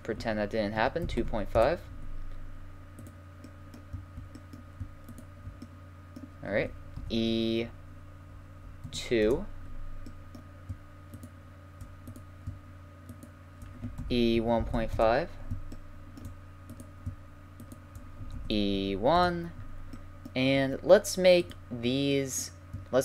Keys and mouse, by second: 3.0-4.6 right drag, 4.6 middle click, 5.1-6.8 right drag, 6.8 middle click, 7.0 e, 11.1 middle click, 11.7-15.0 right drag, 14.0 e, 16.7-19.3 right drag, 18.3 e, 19.3 middle click, 19.9 click, 21.4-21.7 middle drag, 21.7-22.3 right drag, 22.3-23.0 middle drag.